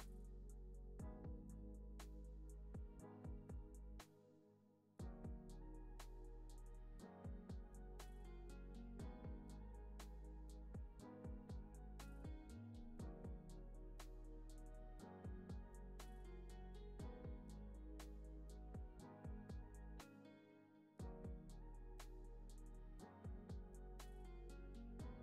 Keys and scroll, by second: 3.5 p, 9.6 z, 13.2 BackSpace, 19.3 Right.